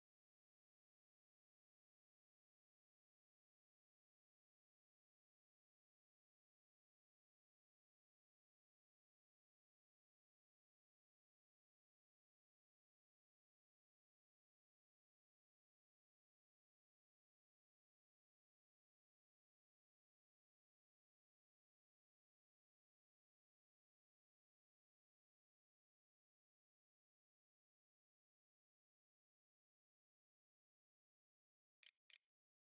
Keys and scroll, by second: 29.7-32.6 typing.